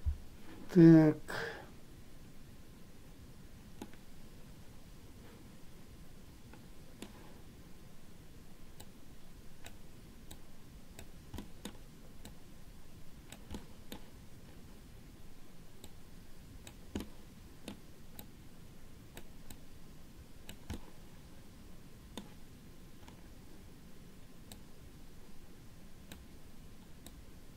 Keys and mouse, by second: 4.1-7.2 middle drag, 9.1 click, 10.6 click, 11.7 middle click, 12.6-13.7 drag, 13.9 middle click, 16.2 click, 17.3 middle click, 18.5-19.5 drag, 19.7-20.9 drag, 21.0-22.5 middle drag, 24.8-26.5 drag, 27.4-27.5 drag.